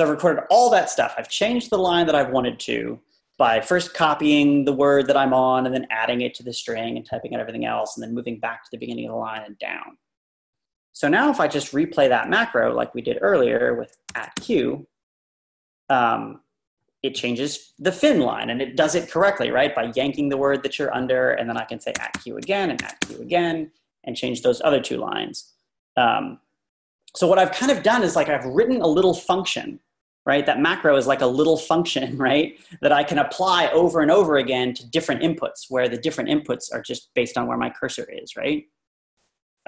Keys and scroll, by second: 13.9-14.9 typing, 21.8-22.8 typing, 37.0 Up, 38.4 Up, 39.2 Down, 39.2 Down.